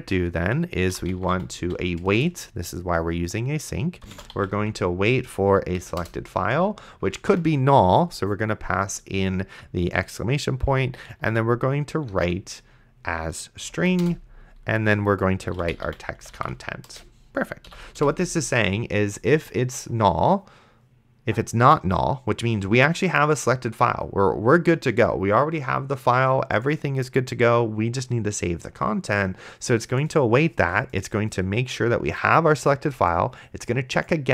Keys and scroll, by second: 0.8 a, 1.3 i, 1.6 t, 2.1 space, 4.3 s, 4.6 l, 5.8 Down, 6.0 Return, 7.5 shift+1, 10.7 ., 11.2 w, 12.1 r, 13.6 Down, 14.0 Return, 15.2-18.0 typing, 17.7 End.